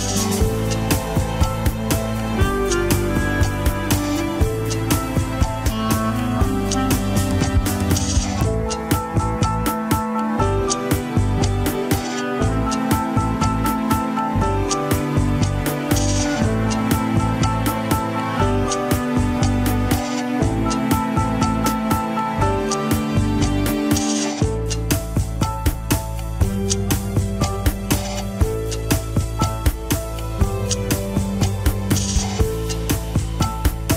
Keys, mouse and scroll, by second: 6.1-6.7 scroll down 1, 6.7 KP_1, 7.2 ctrl+Tab, 8.1 click, 8.5 scroll up 3, 9.4 ctrl+Tab, 10.5 click, 10.9 alt+z, 11.9 alt+z, 12.9 g, 18.5-20.6 middle drag, 20.6 g, 23.9 middle click, 24.7 scroll down 1, 24.9 KP_1, 25.2 scroll up 2, 26.4 a, 27.2 alt+g, 27.4-28.7 middle drag, 28.7 KP_1, 29.0 scroll up 1, 29.2-29.7 scroll down 9, 29.7 shift+middle click, 30.3 scroll up 3, 30.5 scroll down 1, 32.0 ctrl+Tab, 32.4 alt+h, 32.6-33.2 scroll up 3, 33.2 ctrl+s, 33.6 click.